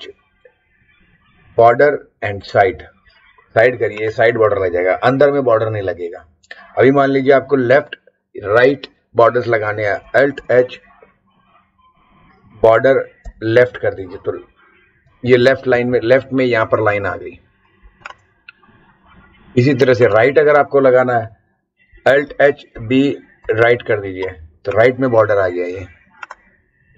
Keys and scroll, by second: 1.5 b, 2.4 s, 10.3 alt+h, 12.6 b, 13.2 l, 15.1 Right, 15.5 Left, 22.2 alt+h, 22.7 b, 23.4 r.